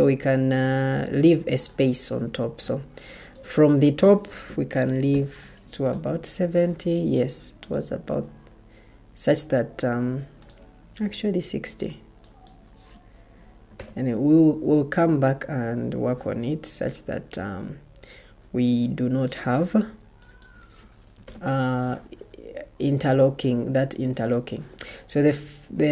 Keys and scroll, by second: 4.7-5.5 typing, 13.3-14.2 typing, 20.8-21.6 typing.